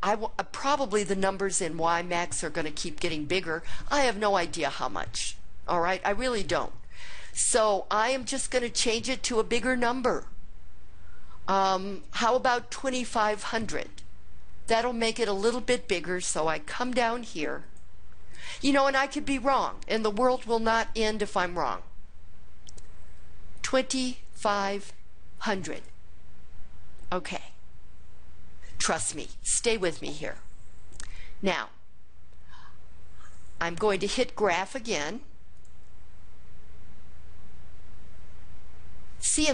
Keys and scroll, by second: 23.7 2, 24.4 5, 25.5 0, 25.8 0.